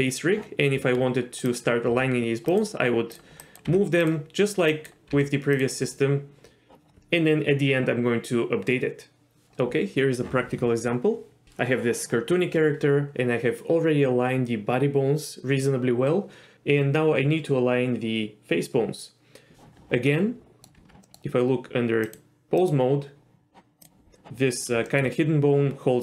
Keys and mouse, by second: 0.7 Tab, 1.4 click, 1.9 g, 3.6 g, 4.7 click, 5.8 g, 20.2-20.6 middle drag, 20.7 Tab, 21.1 middle click, 22.0 click, 22.6 click, 23.8 click, 24.9 shift+middle drag.